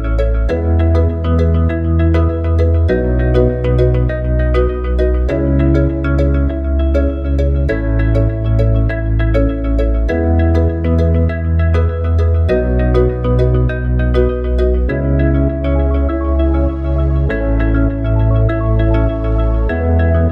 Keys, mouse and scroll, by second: 2.7 click, 4.9 e, 7.8 ctrl+z, 10.0 e, 12.8 e, 15.3 click.